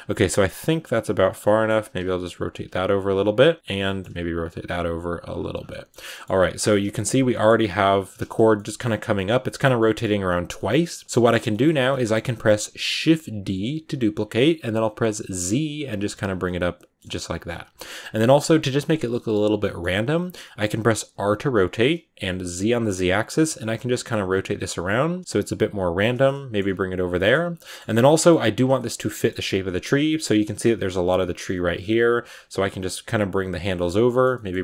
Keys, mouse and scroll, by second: 0.2 g, 1.1 right click, 1.3 scroll up 1, 1.3 middle click, 1.7 r, 1.9 g, 2.5 r, 2.9 g, 3.5 right click, 3.7 middle click, 4.0 r, 4.5 g, 4.6 r, 5.1 g, 5.4 scroll down 5, 5.5 middle click, 5.8 scroll up 1, 5.9 scroll down 2, 6.0 middle click, 6.2 g, 7.2 middle click, 7.4 r, 7.7 g, 8.2 a, 8.4 middle click, 8.8 a, 9.0 scroll up 1, 9.0 middle click, 9.5 scroll down 3, 9.6-12.0 middle drag, 12.0 scroll up 1, 12.1-12.9 scroll down 1, 12.9 shift+d, 16.3 middle click, 17.1 g, 17.6 middle click, 17.8 scroll up 1, 18.1 middle click, 18.9 scroll up 1, 19.0-21.0 middle drag, 21.0 r, 26.1 middle click, 26.6 g, 27.0 middle click, 27.3 a, 27.5 middle click, 27.7 scroll down 3, 28.0 middle click, 28.1-29.2 scroll up 4, 28.6 shift+middle click, 29.0 middle click, 29.8 right click, 30.0-31.1 middle drag, 31.1 g, 31.7 r, 32.3 r, 32.8 g, 33.5 right click, 33.6 scroll up 1, 33.6 middle click, 34.4 g.